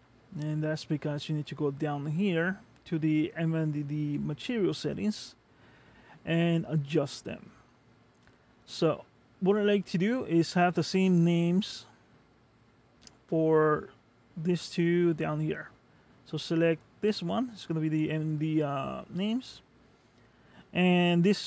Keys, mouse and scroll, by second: 1.7-5.2 scroll down 3, 6.1-6.7 scroll up 5, 8.9 click, 16.9 click.